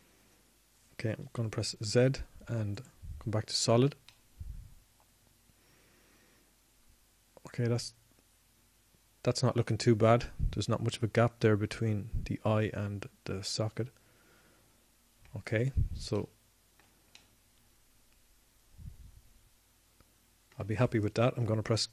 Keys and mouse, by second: 0.0 click, 0.1-1.4 middle drag, 4.9 z, 19.3-21.9 middle drag.